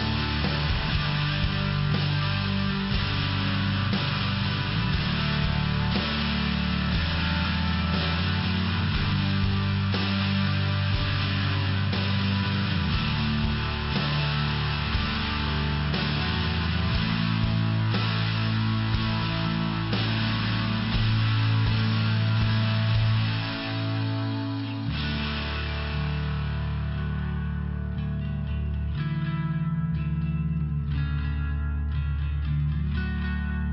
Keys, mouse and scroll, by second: 1.8 click, 2.1 click, 7.9 click, 9.1 click, 10.0 click, 10.9 click, 11.3 click, 11.6 click, 11.8 click, 12.5 click, 12.7 click, 13.6 click, 13.7 click, 14.0 click, 14.1 click, 14.7 click, 14.7 click, 15.1 click, 15.2 click, 15.5 click, 15.5 double click, 16.5 click, 22.9 click, 25.2 click, 25.4 click, 26.0 click, 26.1 click, 27.0 click, 27.1 click, 27.6 click, 27.6 click, 28.2 click, 30.8 click.